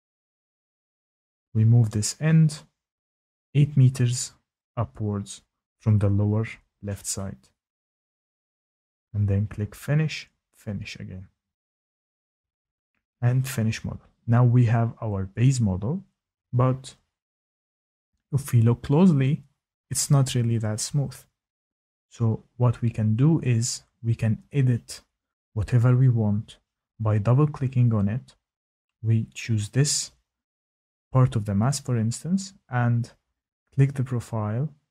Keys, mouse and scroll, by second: 1.1 click, 1.1 typing, 1.4 click, 1.8 click, 2.4 click, 3.0 click, 3.4 click, 3.9 click, 4.9 click, 5.0 click, 5.6 click, 5.6 click, 5.8 click, 6.6 click, 6.8 Tab, 6.9 click, 7.9 click, 8.1 typing, 8.3 Return, 9.2-10.4 scroll, 10.4-10.9 scroll, 10.9 click, 11.9 click, 14.1 click, 14.8 scroll, 15.9 shift+middle click, 17.0 shift+middle click, 19.8 shift+middle click, 24.1 shift+middle click, 26.2 shift+click, 26.9 click, 26.9 click, 27.0 click, 28.1 shift+click, 28.4 click, 29.2 click, 30.2 click, 30.4 click, 31.4 click, 32.2 click, 32.4 click, 34.2 Tab, 34.7 click.